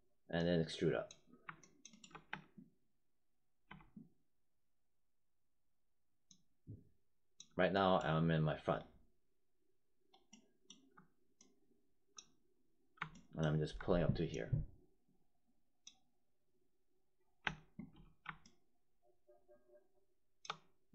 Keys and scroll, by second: 2.2 space, 3.6 space, 17.3 space.